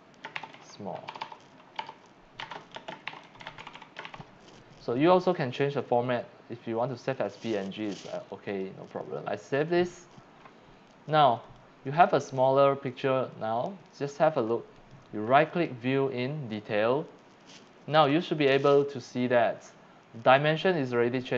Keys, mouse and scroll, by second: 0.0-4.6 typing, 5.2 click, 8.5 click, 9.4 click, 11.4 click, 12.2 click, 13.3 click, 14.7 right click, 15.5 click, 17.5 click.